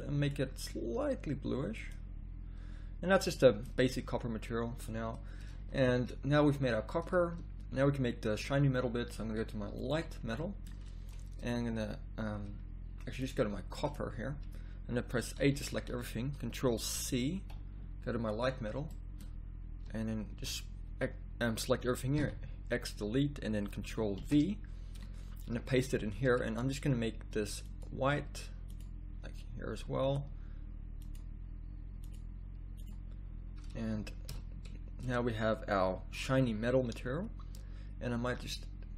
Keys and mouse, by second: 5.0 middle click, 5.5 z, 5.7 z, 13.2 z, 18.3 ctrl+c, 18.3 a, 34.6 shift+z.